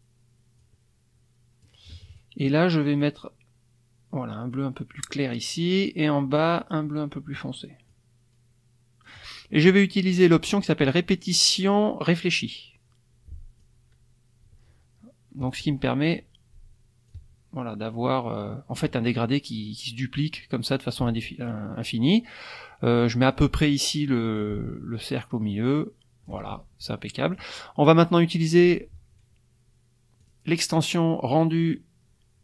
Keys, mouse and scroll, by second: 0.6-1.8 drag, 3.0-5.2 drag, 6.4 click, 7.9-9.2 drag, 11.3 click, 12.2 click, 13.6-15.7 drag, 17.1-18.9 ctrl+drag, 20.9-23.5 ctrl+drag, 24.4-26.4 ctrl+drag, 26.9 click, 30.2 click.